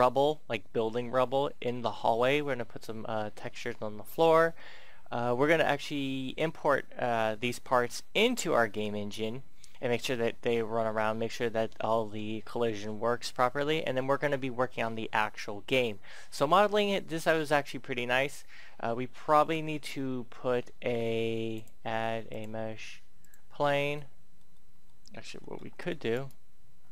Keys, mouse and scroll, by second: 18.6 middle click, 19.3 Tab, 21.5 click, 23.9-25.7 middle drag, 26.0 right click, 26.6 Tab.